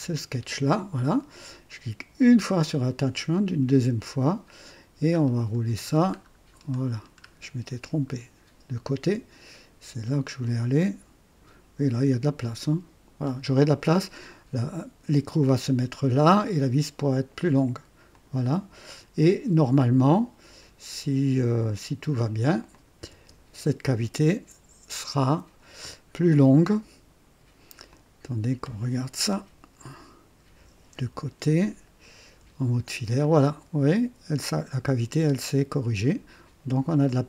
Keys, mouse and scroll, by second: 2.1 click, 3.3 click, 5.1-5.7 scroll up 2, 5.7-7.7 scroll down 8, 18.1 click, 22.6 click, 23.1-24.4 typing, 23.8-26.5 drag, 27.9 click, 29.3 KP_1, 30.9 KP_3, 32.2 &, 33.2-34.3 drag, 34.3 middle click, 37.0-37.2 middle drag.